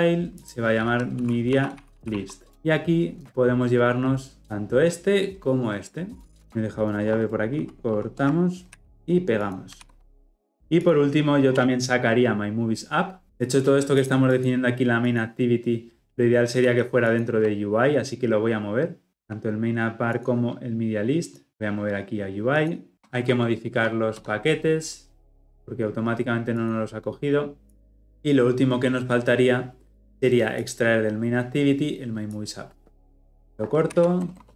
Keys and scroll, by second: 2.5 ctrl+alt+Left, 6.4 ctrl+z, 8.7 ctrl+x, 9.8 ctrl+v, 22.9 alt+Return, 33.9 ctrl+x.